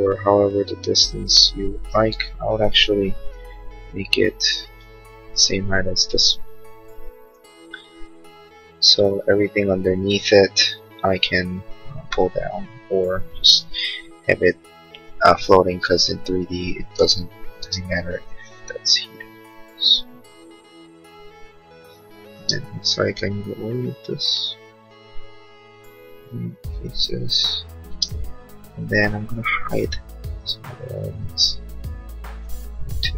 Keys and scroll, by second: 17.3 p, 17.7 space, 18.3 p, 22.5 space, 28.0 space, 28.1 Escape, 29.8 h.